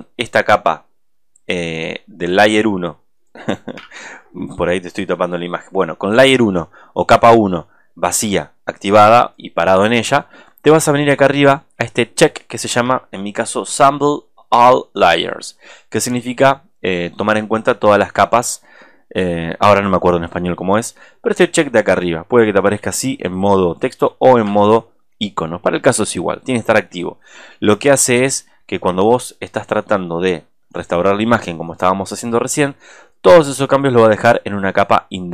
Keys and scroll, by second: 4.0 super+-, 12.9 super+=, 24.7 super+-.